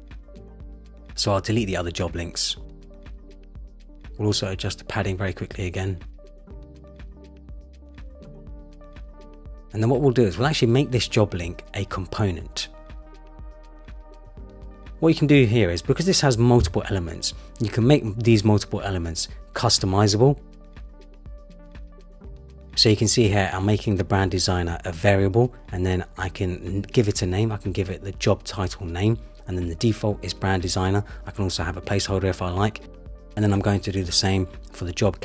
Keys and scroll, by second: 6.1 Down, 7.3 Down, 8.5 shift+Down, 9.4 shift+Down, 12.8 Return.